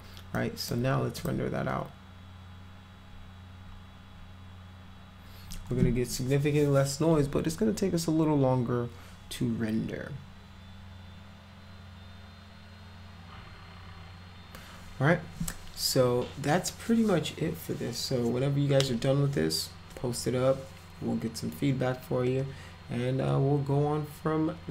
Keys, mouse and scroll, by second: 0.4 click, 1.2 click.